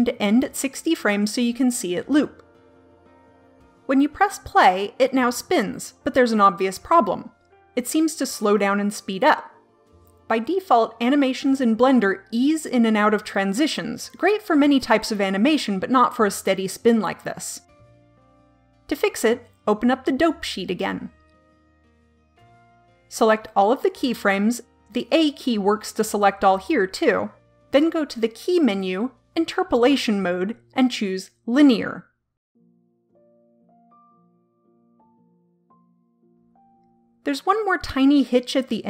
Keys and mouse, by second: 17.8 click, 19.5-20.5 drag, 21.1 click, 23.2 a, 24.1 a, 28.3-31.3 drag, 29.1 typing, 34.5-36.5 drag.